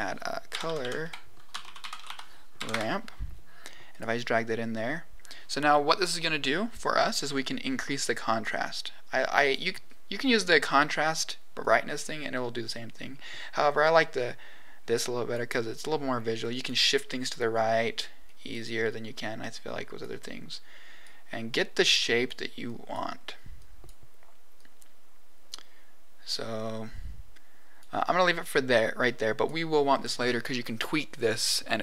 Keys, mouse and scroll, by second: 0.6 Down, 0.7 Down, 7.1-9.5 drag, 10.4 click, 11.5-15.3 drag, 16.4 click, 17.1 click, 18.2 click, 18.8-20.0 drag, 20.4 click, 21.9 click, 22.6 click, 23.5 click, 24.5 click, 25.2 click, 28.9 click.